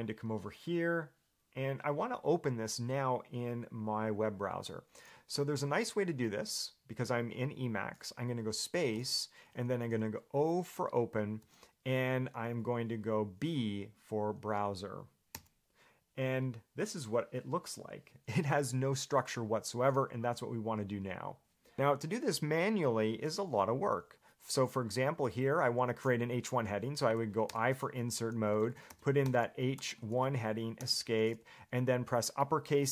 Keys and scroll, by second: 21.7 u, 27.7-30.2 typing, 31.0 Escape.